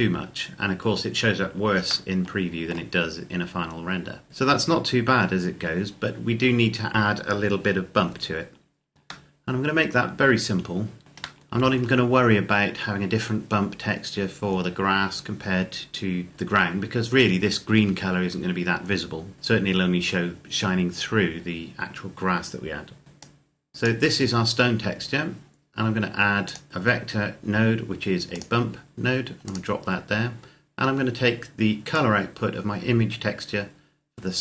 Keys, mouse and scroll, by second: 1.9 shift+middle click, 4.3 scroll up 1, 8.2-8.6 scroll down 1, 9.1 shift+middle click, 11.0 scroll up 1, 11.2 shift+middle click, 19.3-20.0 scroll up 1, 23.0 click, 26.2 click, 28.3 click, 31.7 click.